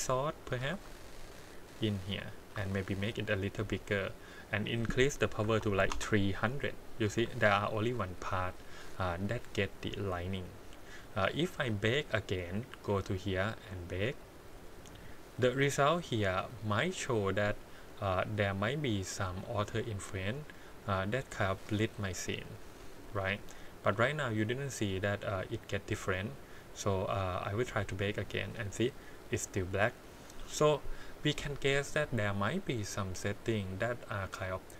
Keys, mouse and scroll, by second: 0.5 t, 0.5 g, 2.5 s, 3.8 click, 4.6 click, 5.8 KP_0, 7.0 g, 8.8-10.0 scroll up 4, 10.9 click, 12.8 click, 14.1 click, 17.9-18.9 scroll down 1, 18.9-19.4 scroll up 1, 19.4-20.7 scroll down 1, 20.7 click, 21.2 g, 22.7 click, 25.3 click, 26.2 click, 26.5-27.6 drag.